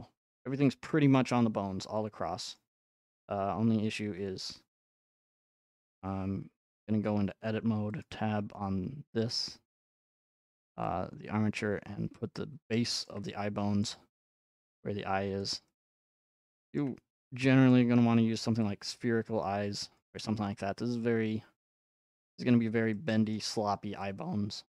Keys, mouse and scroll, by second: 1.0 scroll, 1.1 scroll, 1.1-1.5 scroll, 1.4-1.8 scroll up 1, 1.8 scroll, 2.6 scroll, 3.4-4.0 scroll, 4.0 ctrl+Tab, 5.9 click, 7.1 Tab, 7.1-12.0 drag, 12.4 shift+click, 13.1-15.1 shift+middle drag, 13.8-14.8 scroll up 1, 14.8-15.4 scroll up 1, 15.4 click, 16.2 scroll up 1, 16.2 shift+middle click, 16.8 scroll, 17.7-18.2 scroll, 20.0 click, 20.4-21.0 scroll, 21.6-23.9 scroll, 24.5-24.7 scroll.